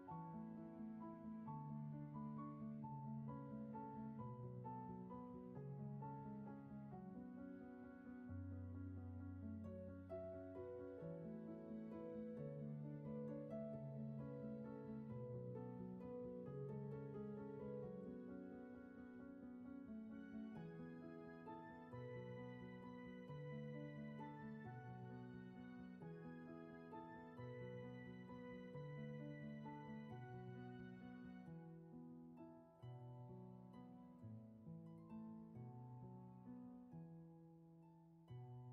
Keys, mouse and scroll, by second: 6.0 ctrl+z, 6.5 space, 12.8 ctrl+z, 19.7 ctrl+z, 21.8 space, 23.6 ctrl+z, 26.9 ctrl+z, 32.4 ctrl+z.